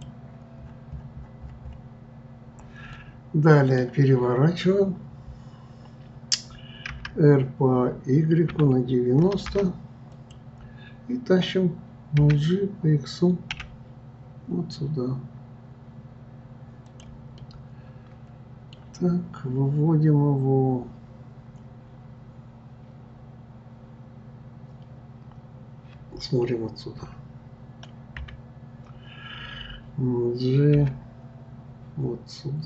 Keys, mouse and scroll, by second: 0.6-2.9 scroll down 21, 2.9-5.9 middle drag, 17.4-20.4 middle drag, 27.0 KP_1, 30.7 g.